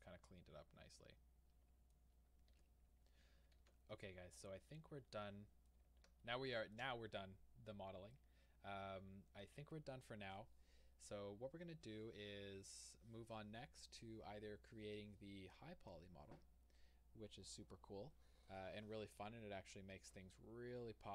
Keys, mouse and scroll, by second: 0.0-2.6 middle drag, 2.1 scroll down 1, 2.6 Tab, 3.6 alt+a, 4.0-4.4 middle drag, 4.9-8.5 middle drag, 6.2 scroll down 2, 7.6-8.1 scroll down 2, 8.6 middle click, 9.0-21.1 middle drag, 20.1 scroll up 2.